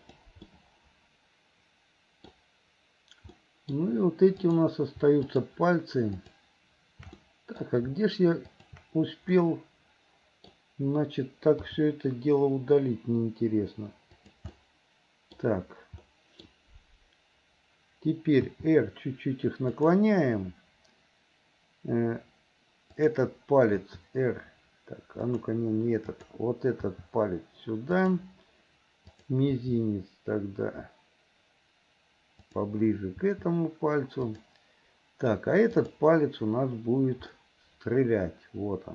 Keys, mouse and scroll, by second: 0.5-2.3 middle drag, 3.4 middle click, 4.5 click, 5.2 shift+click, 6.2 shift+click, 7.2 middle click, 8.5 shift+click, 9.4-10.5 middle drag, 11.6 r, 14.5 middle click, 16.0 middle click, 18.5 r, 23.0 click, 23.7 r, 26.2 click, 29.2 click, 29.6 r, 33.3 r, 35.7 click, 37.4-38.9 middle drag.